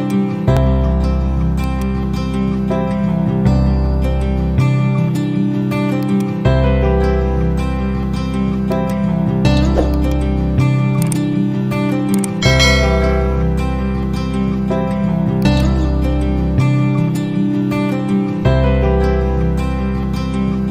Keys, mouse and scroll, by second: 0.0-1.1 typing, 5.1-5.8 typing, 8.7 click, 10.6-13.0 typing, 12.5 click, 15.1-15.9 typing, 15.4 click, 17.5-18.3 typing.